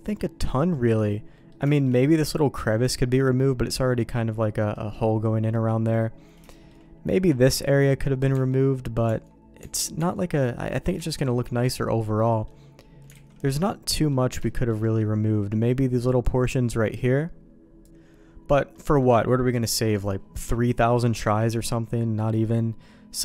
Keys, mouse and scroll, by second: 0.7 middle click, 1.3 middle click, 1.7 shift+click, 2.8 click, 4.7 middle click, 5.2 middle click, 6.5 shift+middle click, 8.3 Tab, 9.0 Tab, 9.6 Tab, 9.9 Tab, 10.5 middle click, 11.0 shift+middle click, 12.3 middle click, 13.1 alt+a, 13.3 middle click, 14.4 shift+middle click, 14.8 middle click, 18.7 middle click, 20.3-23.2 middle drag.